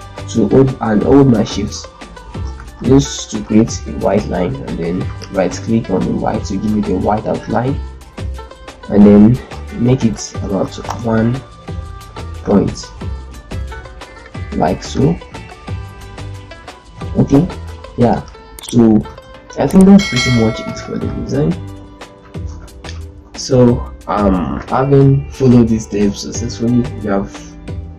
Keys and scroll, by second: 2.0 ctrl+space, 2.7 ctrl+shift+c, 6.5 F12, 10.5 1, 10.6 Return, 12.0 shift+Up, 12.6 shift+Up, 12.8 shift+Up, 12.9 shift+Up, 13.5 shift+Up, 15.3 shift+Up, 15.5 shift+Up, 15.8 shift+Up, 16.1 shift+Up, 16.3 shift+Up, 17.6 z, 18.8 ctrl+space, 22.3 ctrl+shift+g, 22.7 shift+F2, 24.1 F9.